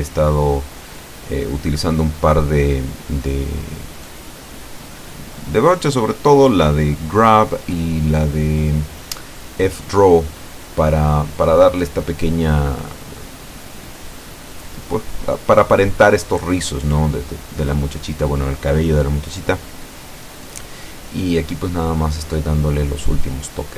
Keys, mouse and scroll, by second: 0.3 Escape, 1.4 w, 2.6 click, 4.0 click, 4.5 click, 5.2 Tab, 6.4 click, 7.2 click, 7.7 click, 9.6 click, 11.0 click, 11.7 shift+middle click, 13.4 click, 14.1 click, 15.0 ctrl+z, 15.5 ctrl+click, 16.2 click, 16.7 click, 17.3 click, 18.0 click, 18.6 click, 19.2 click, 19.9 click, 20.5 click, 21.5 click, 22.0 click, 22.7 click, 23.2 click, 23.5 scroll down 1.